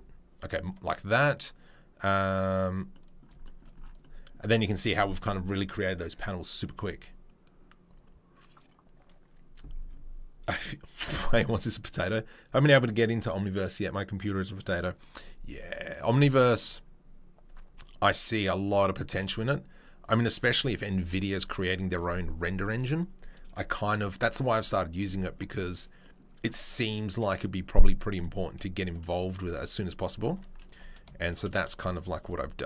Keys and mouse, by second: 16.6-18.6 drag, 18.6-32.6 middle drag, 19.1 g, 21.0 Delete, 30.3 Tab, 30.7 2, 31.5 click, 31.8 shift+click.